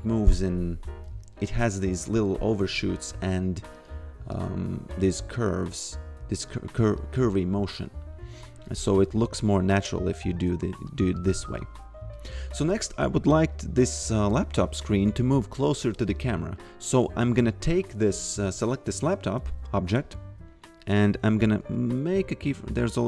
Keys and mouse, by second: 2.5 click, 5.1 f, 7.0 click, 9.1 f, 10.9 click, 11.3 f, 13.0 click, 16.6 click, 20.5 click.